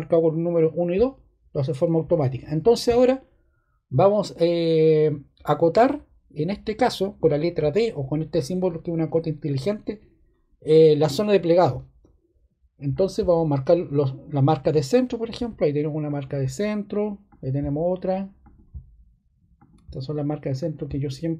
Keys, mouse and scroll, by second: 14.3 click.